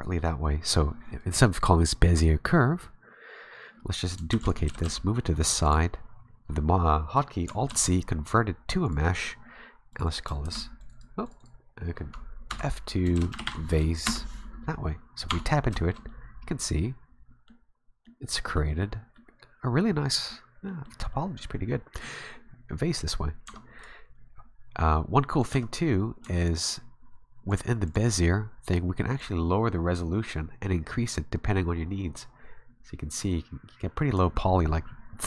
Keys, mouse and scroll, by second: 4.3 shift+d, 4.7 g, 7.7 alt+c, 9.9 click, 10.1 click, 10.4 shift+v, 10.8 click, 10.9 click, 11.2 click, 11.4 click, 12.5 F2, 15.3 Tab, 15.8 shift+middle click, 16.1 middle click, 18.0 middle click, 18.3 t, 19.1 middle click, 20.7 middle click, 21.1 middle click, 23.5 Tab, 23.8 right click, 25.4 right click, 25.5 Tab, 26.2 Tab, 26.4 right click, 27.5 click, 27.9 click, 29.2 click.